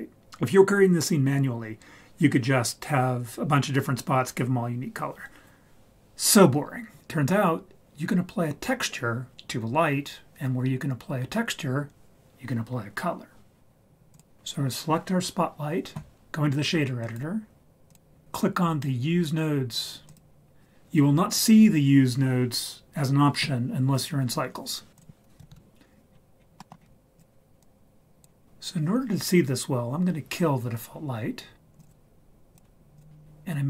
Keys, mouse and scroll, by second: 7.0 click, 14.1 click, 17.0-17.9 drag, 20.1 click, 24.9 click, 25.4 a, 25.5 KP_Decimal, 26.1-26.7 scroll down 5, 26.6 middle click, 26.8-27.2 scroll up 2, 27.1 click, 31.8 click, 31.9 right click, 32.9 click.